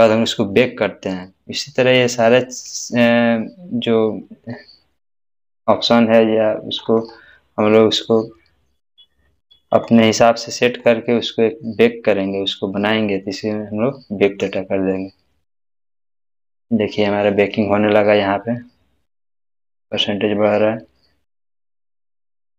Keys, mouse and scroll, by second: 2.9 scroll up 1, 3.0-5.6 scroll down 1, 5.6-8.9 scroll up 1, 9.6 scroll up 1, 14.2 click, 14.5 click.